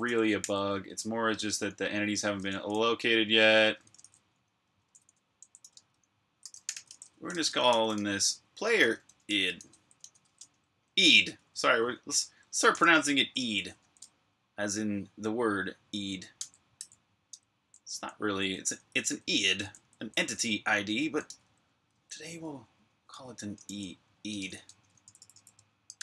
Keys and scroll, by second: 0.0-0.6 typing, 3.4-10.1 typing, 11.3-13.7 typing, 16.3-26.0 typing.